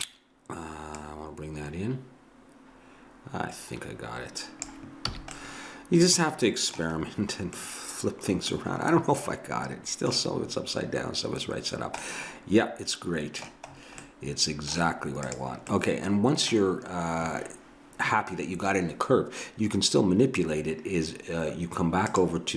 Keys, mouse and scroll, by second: 1.0-2.8 drag, 5.2 a, 5.4 middle click, 15.3-17.1 drag, 22.1-22.5 drag.